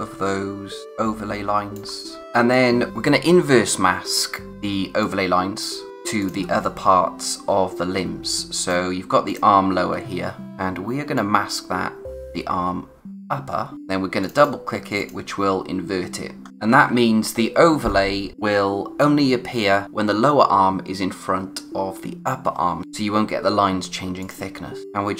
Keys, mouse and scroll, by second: 0.2-0.8 scroll up 1, 2.0 click, 2.5 space, 2.5 click, 2.8 space, 5.0 click, 6.6 click, 6.9 space, 9.3 click, 11.8 space, 13.7-14.2 scroll up 1, 14.2 click, 16.3-17.5 scroll down 1, 24.5 scroll down 1, 24.8 space.